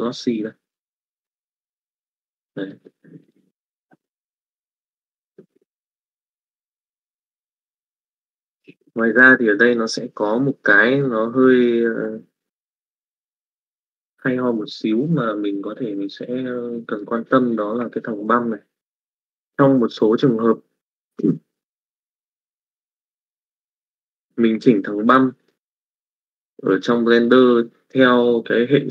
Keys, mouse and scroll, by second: 7.1 middle click, 7.8 middle click, 25.0 middle click, 26.4 middle click.